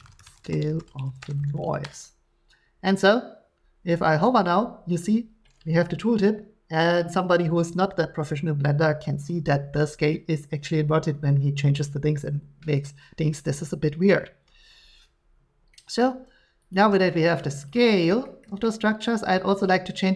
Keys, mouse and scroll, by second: 0.0-2.0 typing, 16.0 scroll, 16.7 click, 16.8 g, 17.7 click, 18.4 shift+middle click.